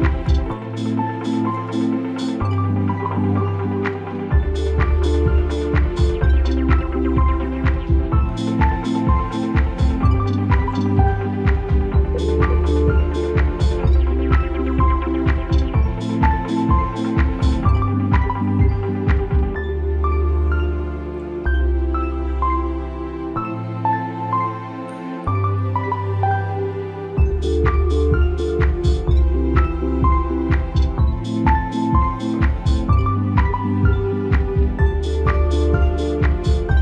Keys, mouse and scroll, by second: 0.7 click, 1.1-1.5 alt+scroll up 2, 2.7-8.4 drag, 9.9 space, 10.0 click, 14.8 click, 17.1 space, 17.2 click, 22.8 space, 23.0 click, 24.6 click, 29.4 alt+scroll down 1, 29.8 click, 30.0 space, 30.0 click, 31.4 alt+scroll down 1, 33.5 click.